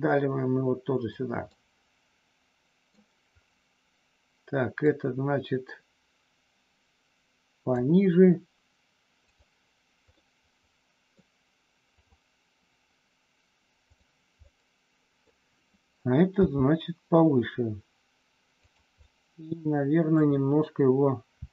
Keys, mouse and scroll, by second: 1.5-3.0 middle drag, 4.7-7.7 drag, 9.2 click, 10.2-11.2 middle drag, 13.8 click, 14.3 middle click, 16.3 g, 18.6 click, 19.0-20.1 middle drag, 21.3 r.